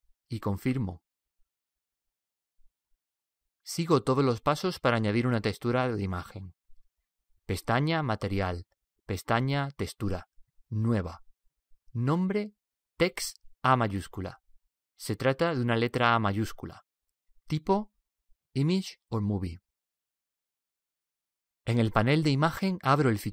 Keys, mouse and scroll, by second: 1.7 n, 2.8-6.9 middle drag, 2.8-3.7 scroll up 1, 7.8 click.